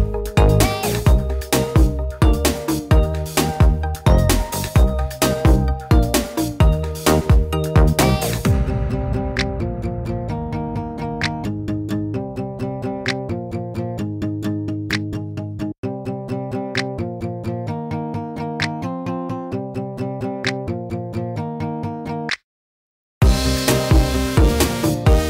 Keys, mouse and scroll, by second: 0.4-1.1 right drag, 0.6 drag, 2.4 click, 2.8 right drag, 3.3 click, 4.5 right click, 6.0 middle click, 6.6 click, 6.8 Right, 7.6 click, 8.3 middle click, 9.2 click, 10.0 middle click, 10.3 click, 11.1 drag, 11.1 right click, 11.3-12.5 middle drag, 12.5-12.9 drag, 13.3-13.9 drag, 14.0-15.2 middle drag, 15.7 click, 16.8 click, 19.3 drag, 20.8 click.